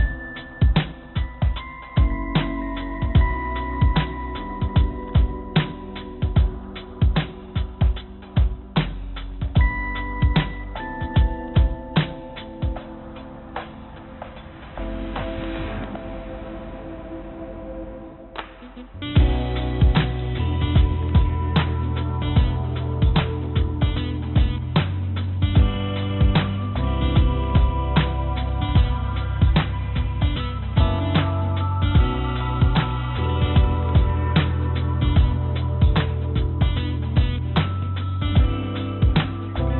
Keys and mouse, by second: 4.0 click, 4.7-5.9 drag, 6.7 click, 7.6 click, 8.3 click, 11.6-14.1 drag, 16.6 click, 16.7 click, 22.3 Tab, 26.5-29.0 drag, 32.7 click.